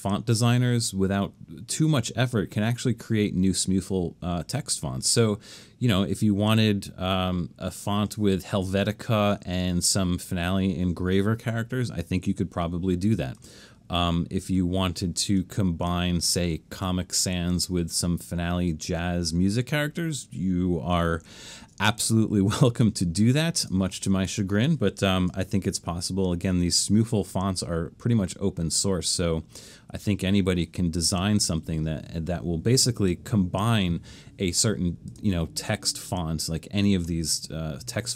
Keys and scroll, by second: 26.4 super+-, 28.3 super+-.